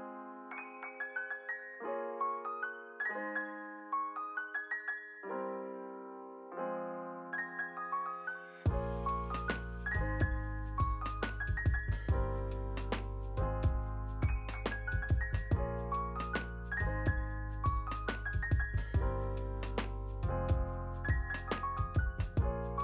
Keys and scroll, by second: 12.6 space, 14.5 y.